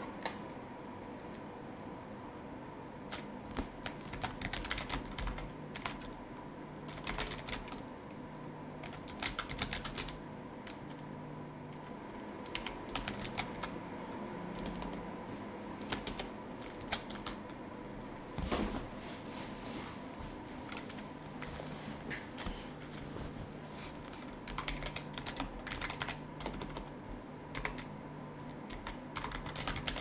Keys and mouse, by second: 3.8-7.5 typing, 8.8-10.5 typing, 12.9 space, 13.2 shift+a, 13.5 b, 14.5 BackSpace, 15.8 BackSpace, 16.0 shift+Return, 16.8 shift+a, 17.1 b, 17.8 space, 24.2-26.5 typing, 27.5 z, 28.9-30.0 typing.